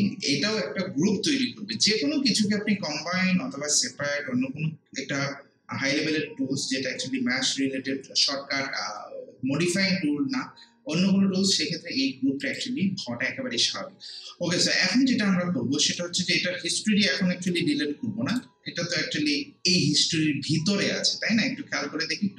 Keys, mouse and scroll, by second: 12.4 click, 15.9-20.4 drag.